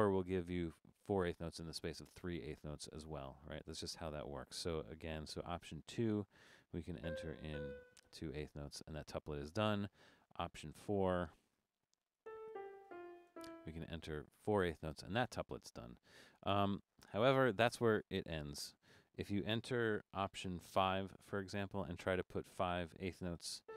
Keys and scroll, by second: 5.8 alt+2, 7.0 4, 7.3 Down, 7.5 4, 10.9 alt+4, 12.0 Down, 12.2-14.6 typing, 12.3 Down, 12.7 Down, 13.2 Down, 17.6 Left, 17.8 BackSpace, 18.0 BackSpace, 21.3 alt+5, 23.6 4.